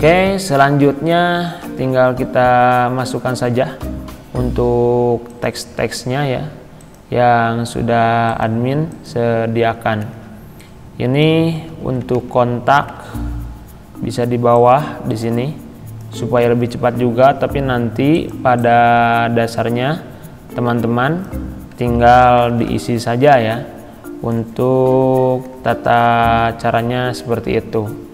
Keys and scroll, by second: 11.7 ctrl+c, 13.2 ctrl+v, 22.1 ctrl+c, 25.9 ctrl+v.